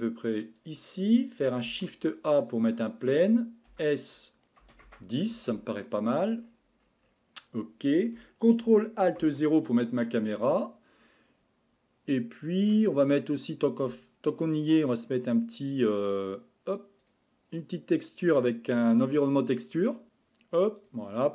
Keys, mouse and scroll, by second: 1.7 shift+a, 3.7 s, 5.8-6.4 middle drag, 6.4-6.9 scroll down 9, 7.0-9.2 scroll up 4, 9.2 alt+KP_0, 13.5 click, 17.1 click, 18.3 click.